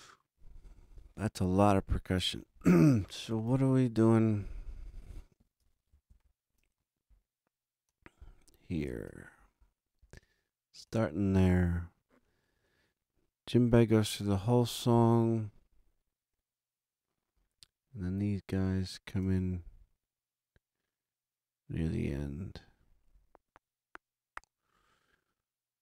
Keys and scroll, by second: 3.3 super+=, 6.0 ctrl+alt+super+Up.